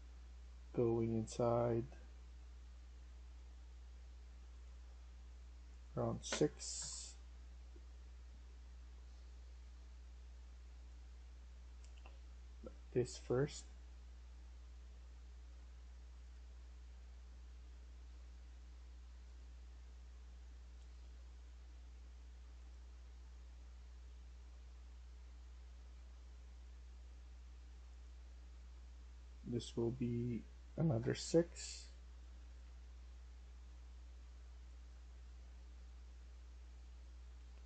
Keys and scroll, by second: 0.5-1.9 w, 6.4-6.7 typing, 8.9-12.8 typing, 16.9-18.1 a, 23.7-25.5 a, 30.7-37.6 typing, 30.9 Return.